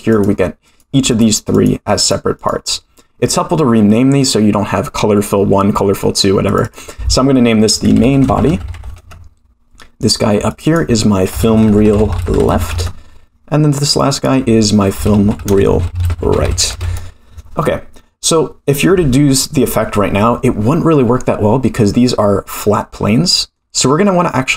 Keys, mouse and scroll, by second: 0.1 click, 0.6 click, 1.1 click, 1.5 click, 2.0 click, 2.3 click, 6.4 click, 6.6-9.7 drag, 10.0 click, 10.5 click, 10.6-13.4 drag, 12.1 e, 13.9 click, 14.1-17.4 drag, 15.8 e, 21.8-23.6 middle drag, 24.1-24.5 middle drag.